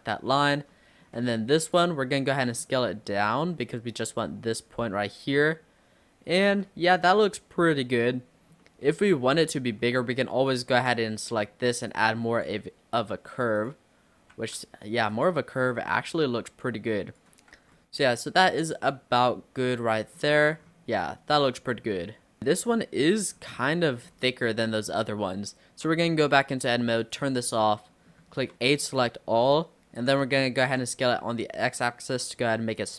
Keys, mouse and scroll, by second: 0.7-1.8 shift+middle drag, 1.8 click, 6.7 Tab, 7.1-9.5 middle drag, 9.5 Tab, 9.8 middle click, 10.5 alt+click, 11.0 scroll down 3, 11.2 middle click, 11.9 click, 13.6 click, 14.4 ctrl+z, 15.1 click, 17.6 Tab, 17.8-20.2 middle drag, 20.2-21.0 scroll down 8, 21.0-23.0 middle drag, 23.0-23.7 scroll up 5, 23.7-24.1 middle drag, 24.1-24.6 scroll down 4, 25.2-25.7 scroll up 2, 25.7 Tab, 27.0 click, 27.4-27.8 scroll up 3, 27.8 middle click, 28.6 a, 28.8-30.7 middle drag, 30.7 s.